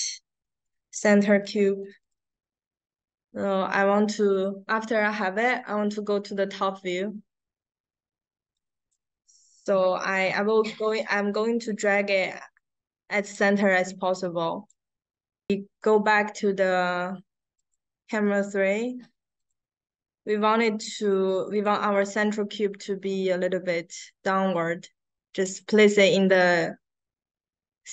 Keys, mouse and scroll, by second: 0.0-1.0 typing, 1.9 click, 6.8 click, 8.2 q, 8.4 click, 9.2 middle click, 10.5 click, 11.3 middle click, 11.7 click, 12.1-12.4 scroll down 1, 13.2 drag, 14.6-15.4 drag, 15.8 right click, 17.5 click, 19.3 click, 21.5 click, 22.8 click, 26.4 click.